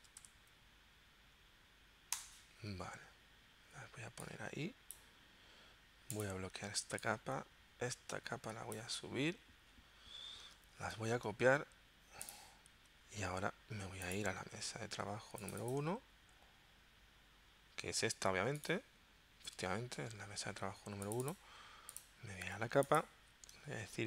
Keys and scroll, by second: 0.0-0.3 typing, 2.1 Return, 10.8 super+c, 20.0 Home.